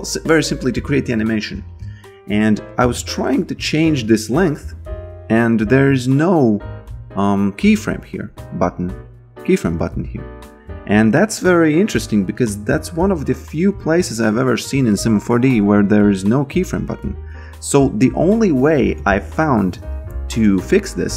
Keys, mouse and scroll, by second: 1.5 click, 1.8 Delete, 2.3 click, 8.6 click, 10.5 click, 14.9 alt+middle click, 18.6 alt+click, 19.0 b, 19.7 shift+c, 20.1 s, 20.9 click.